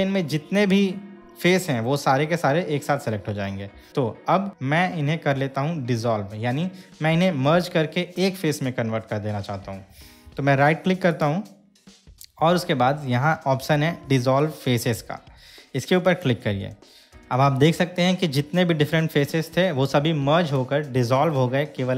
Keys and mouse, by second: 11.3-16.5 right drag.